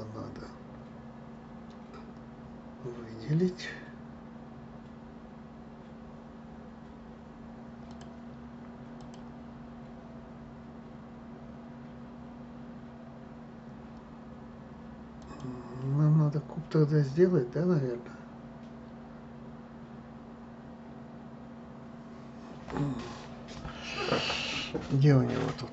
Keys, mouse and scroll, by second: 8.3 click, 9.4 click, 15.6 click.